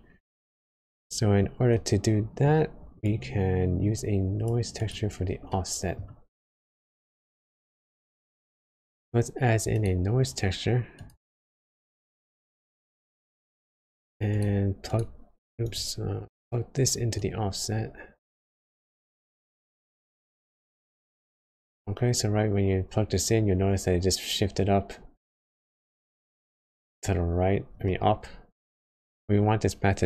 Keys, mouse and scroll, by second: 0.3 click, 0.8-1.4 scroll up 4, 1.4-1.7 scroll down 2, 1.7 middle click, 3.0 click, 4.8 click, 5.4 middle click, 6.1-6.5 scroll up 1, 8.5 shift+a, 11.0 shift+a, 13.3 shift+a, 21.9 scroll down 2, 24.1-25.1 scroll down 1, 25.2 middle click, 26.7-27.2 scroll up 1, 27.8 middle click, 29.2 scroll up 1.